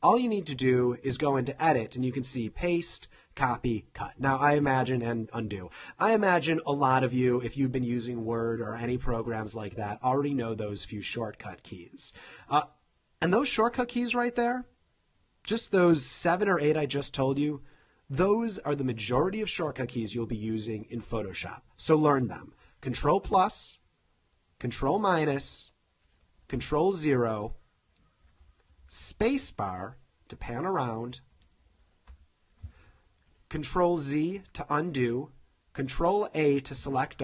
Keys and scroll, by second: 23.0 super+=, 24.7 super+-, 25.4 super+-, 26.5 super+0, 28.7 super+=, 29.4 space, 32.1 super+0, 34.3 super+z, 35.8 super+a.